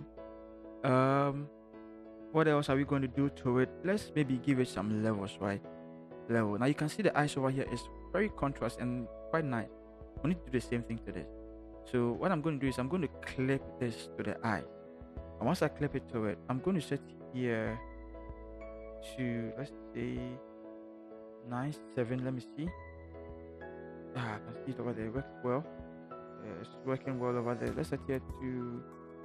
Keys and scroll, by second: 21.5 9.